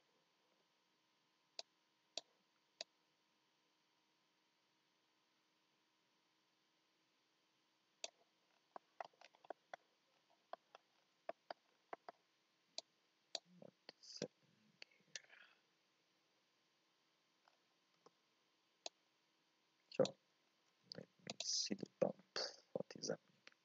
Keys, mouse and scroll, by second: 1.7-5.8 drag, 12.8 click, 18.0 x, 18.9-20.0 drag, 21.4 ctrl+shift+click.